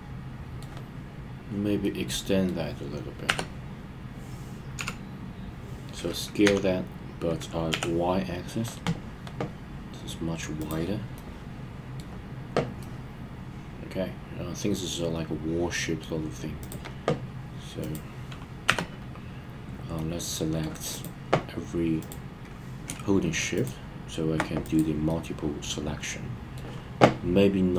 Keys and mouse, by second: 1.8-2.5 middle drag, 3.3 Tab, 4.8 KP_3, 6.4 s, 7.7 y, 10.6 click, 11.2-12.0 middle drag, 12.8-16.1 middle drag, 16.6 click, 17.8 click, 18.7 Tab, 20.0-20.6 middle drag, 22.0 click, 25.1-26.6 middle drag.